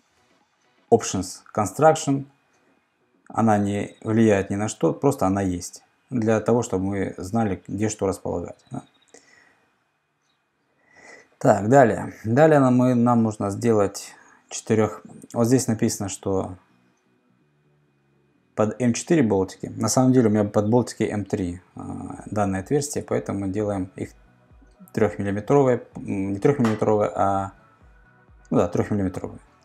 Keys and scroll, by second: 11.6 super+Tab, 23.0 super+Tab, 29.2 c.